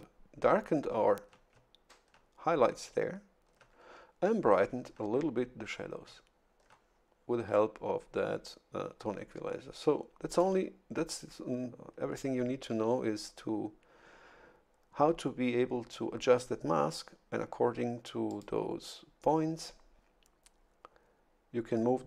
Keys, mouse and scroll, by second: 10.3 click, 18.3 click.